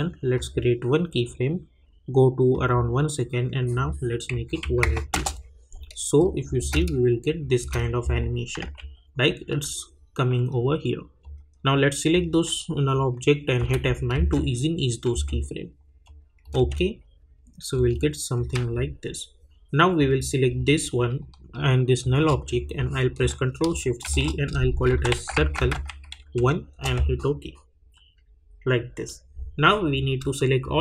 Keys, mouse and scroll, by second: 0.3 click, 2.5 click, 5.1 Return, 6.6 space, 8.6 j, 11.2-13.6 drag, 13.6 F9, 14.1 space, 16.0 click, 16.6 space, 18.3-20.0 drag, 22.0 shift+click, 24.0 ctrl+shift+c, 24.8-26.7 typing, 26.7 Return, 29.7 click, 30.6 shift+click.